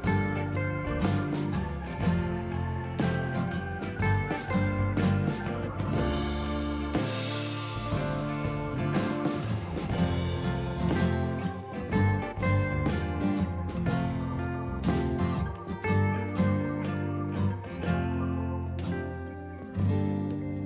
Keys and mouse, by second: 0.0-1.8 typing, 1.1 click, 1.5 ctrl+e, 1.6 ctrl+click, 1.9 click, 2.8 ctrl+e, 2.8 click, 3.0 ctrl+click, 4.5 Delete, 4.6 click, 5.1 a, 5.2 click, 6.3 Escape, 7.3 click, 10.7 right click, 11.4 click, 15.8 click.